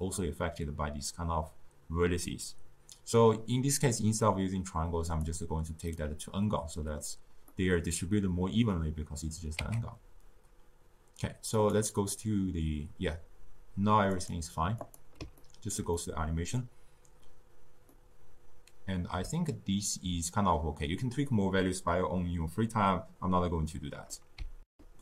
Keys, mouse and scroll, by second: 5.1 click, 5.9-9.6 middle drag, 9.6 z, 12.1-13.6 middle drag, 13.6-14.2 scroll down 2, 14.2 click, 14.8 click, 15.4-20.9 ctrl+middle drag, 21.3-24.3 middle drag, 24.6 ctrl+alt+shift+q.